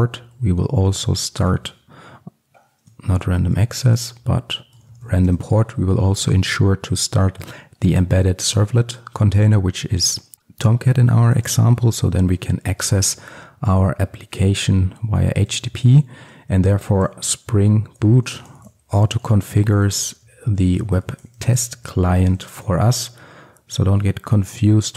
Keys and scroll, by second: 1.0 Return, 1.4 ctrl+space, 1.6 Return, 3.9 Return, 4.0 ctrl+space, 8.6 Return, 19.4 Return.